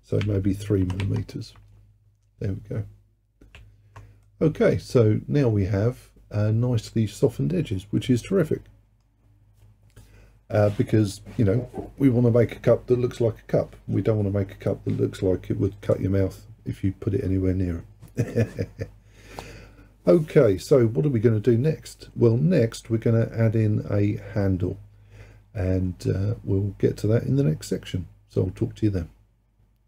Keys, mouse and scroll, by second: 1.0 m, 3.5-4.1 scroll down 1, 4.1 scroll down 1, 4.3-7.3 middle drag.